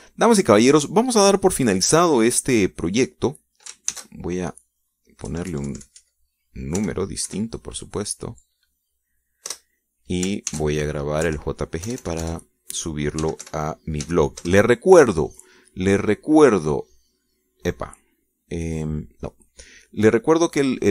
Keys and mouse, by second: 1.2 click, 2.1 click, 3.8 click, 5.5 ctrl+shift+s, 6.9 Right, 7.1 Left, 8.4 BackSpace, 8.9 KP_7, 11.1 Return, 12.1 ctrl+shift+s, 12.9 Right, 13.5 BackSpace, 14.6-15.6 typing, 16.1 Return, 20.8 click.